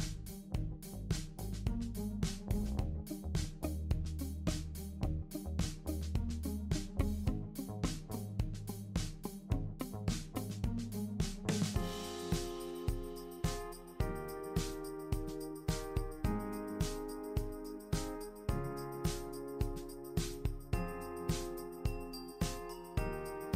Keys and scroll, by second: 11.6 super+d, 19.3 super+d, 20.3 super+d, 20.8 super+d.